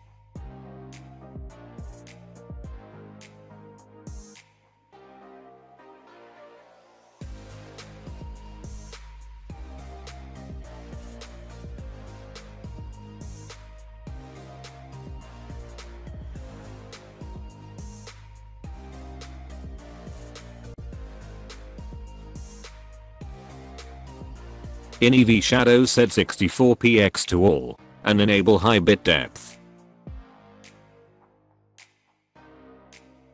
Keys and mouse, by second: 7.0-11.0 drag, 16.1 click, 16.9 click, 17.6 click, 23.1 click, 24.8-25.7 drag, 26.1-26.9 drag, 28.3 click.